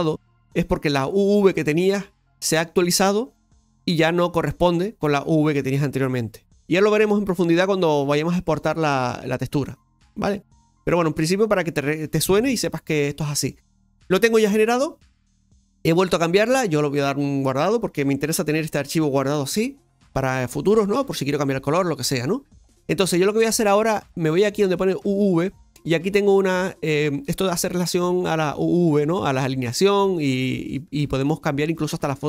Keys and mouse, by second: 7.9-9.5 drag, 9.5-10.8 right drag, 10.8-14.5 drag, 15.8-32.2 drag.